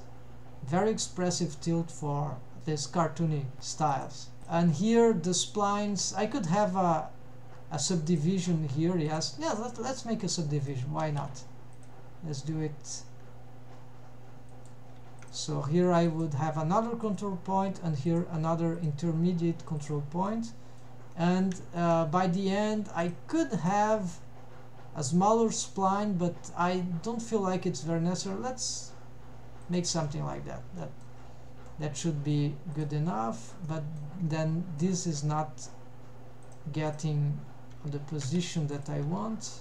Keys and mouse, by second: 4.4 g, 4.5 click, 4.7 g, 5.8 g, 11.2 drag, 11.8-14.8 drag, 15.3 click, 15.7 g, 17.2 click, 17.5 g, 19.3 g, 20.3 middle click, 21.6 shift+middle click, 22.6 g, 23.6 click, 24.0 g, 30.2 middle click, 30.9 middle click, 31.7-32.4 middle drag, 32.8 click, 33.2-33.6 middle drag, 33.8 middle drag, 34.8 middle click, 35.3 g, 37.8 g, 38.8 click, 39.2 g.